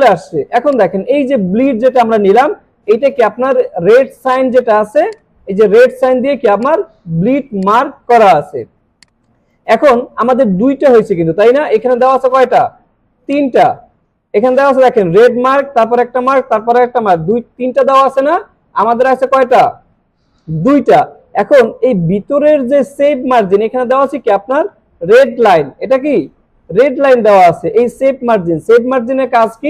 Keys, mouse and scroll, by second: 0.3 alt+scroll down 1, 0.7 click, 2.0 alt+scroll up 1, 4.1 space, 4.2 click, 4.6 space, 5.1-5.7 click, 5.5 space, 6.2 alt+scroll down 1, 6.6 click, 8.0 space, 8.6 alt+scroll down 1, 8.9 space, 9.1-9.6 click, 9.4 space, 9.8 alt+scroll up 1, 12.0 click, 12.1 click, 19.1 click, 21.8 click.